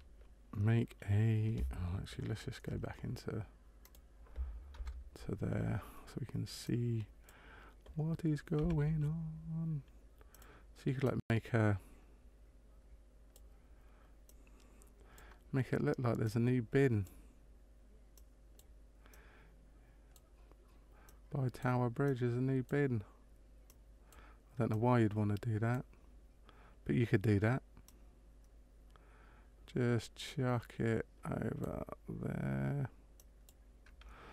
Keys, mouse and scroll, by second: 3.8 click, 4.7 KP_0, 6.6 click, 8.6 s, 11.2 click, 14.3 click, 16.3 click, 18.1 click, 19.1 click, 21.0 click, 22.0 click, 23.7 click, 24.6 click, 26.7 click, 27.8 click, 33.2 click.